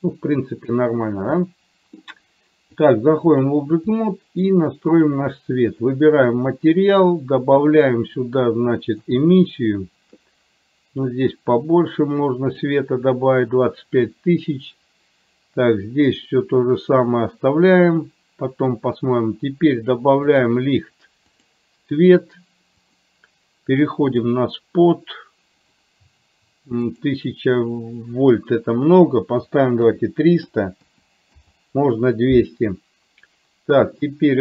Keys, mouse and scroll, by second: 1.6 middle click, 2.8 click, 4.1 middle click, 5.1 click, 7.8-9.6 drag, 11.2-12.7 drag, 20.5 click, 21.3 click, 24.2 click, 27.0-31.5 drag.